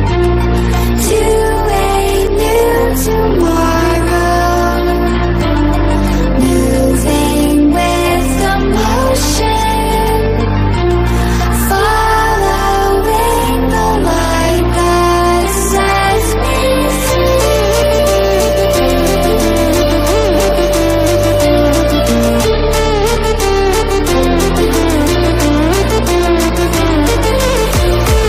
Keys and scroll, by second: 8.2 ctrl+d, 8.9 ctrl+-, 10.4 ctrl+=, 23.3 ctrl+=, 26.2 ctrl+z.